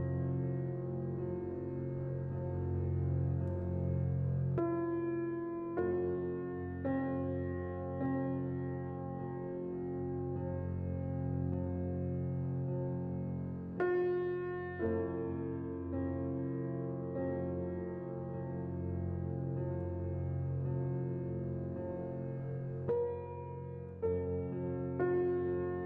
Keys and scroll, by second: 1.6-2.4 typing, 14.5 c, 20.6 z, 22.5-23.3 typing.